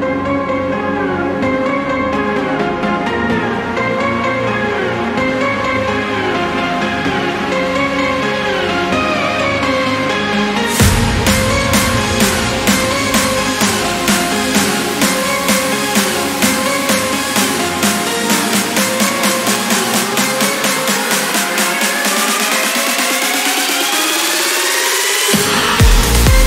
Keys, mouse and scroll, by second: 1.0 scroll up 1, 2.0 click, 2.6 space, 3.3 click, 6.0 click, 8.1 click, 9.3-9.6 scroll up 1, 10.3 click, 11.2 click, 12.0 1, 12.4 0, 13.5 click, 14.5 1, 15.0 0, 16.1-16.5 scroll down 2, 16.7-17.3 scroll down 4, 18.5 click, 19.2 1, 19.7 0, 21.0 click, 21.8 1, 22.1 2, 22.6 scroll down 1, 23.2 scroll up 1, 24.1 click, 25.4 click.